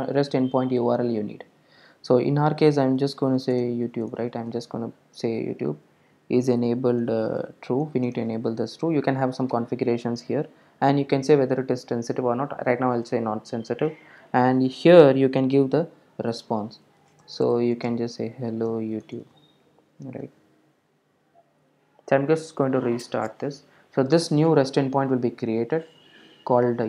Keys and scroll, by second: 20.6 super+s, 21.9 super+r.